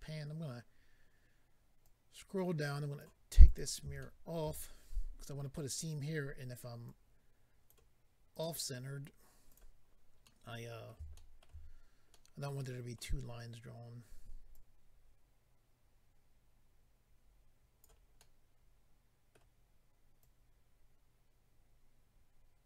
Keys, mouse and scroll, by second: 1.8 click, 3.4 click, 3.5 click, 4.0 shift+middle click, 4.6-5.5 scroll up 6, 6.8 click, 8.3 click, 8.4 click, 9.5 click, 9.5 click, 10.2 middle click, 11.1 shift+middle click, 14.5 click, 18.2 middle click, 20.2 click.